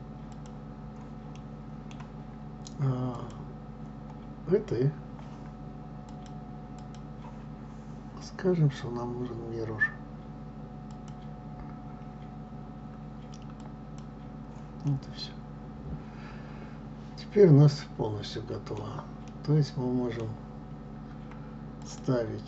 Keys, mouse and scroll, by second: 0.5 Delete, 1.4-3.2 middle drag, 3.2-14.1 drag, 15.0-21.9 middle drag, 21.9 click.